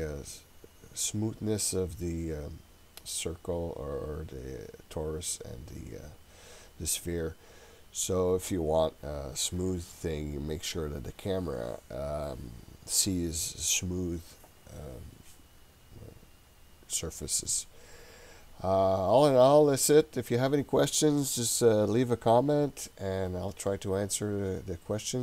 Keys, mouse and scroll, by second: 4.6-5.3 scroll down 1, 5.9-7.6 scroll up 1, 7.6-8.6 scroll down 1.